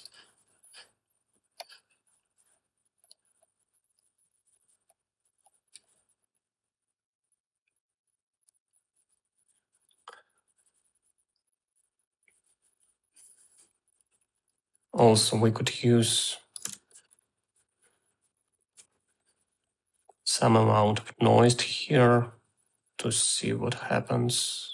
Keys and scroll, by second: 17.2 ctrl+c, 19.2 ctrl+v.